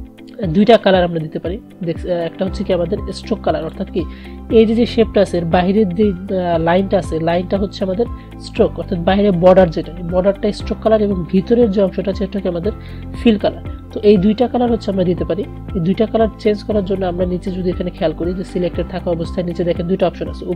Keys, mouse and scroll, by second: 3.2 click, 14.2 click.